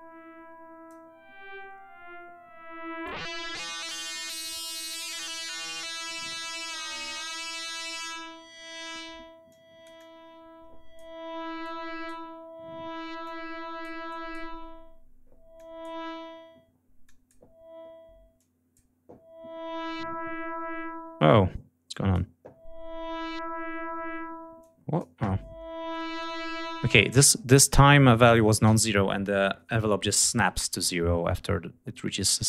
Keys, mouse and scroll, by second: 3.0-4.6 drag, 4.9-5.5 scroll down 2, 5.8 scroll down 2, 6.6-8.1 drag, 9.5-11.1 drag, 11.6 click, 13.2 click, 14.1 click, 15.5 click, 17.0 click, 18.4 click, 21.9 click, 24.6 click.